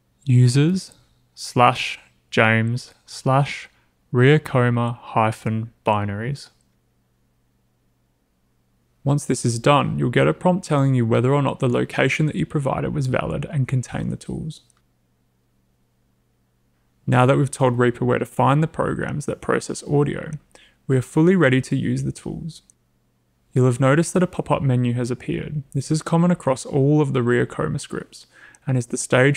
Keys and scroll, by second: 0.0-2.9 typing.